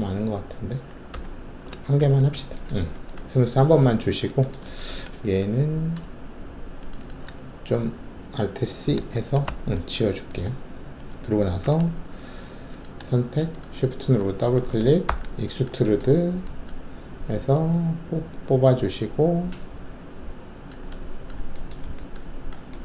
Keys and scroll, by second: 1.1 ctrl+z, 4.9 alt+2, 8.8 alt+c, 9.4 alt+q, 9.9 alt+`, 11.6 alt+3, 15.0 alt+shift+w.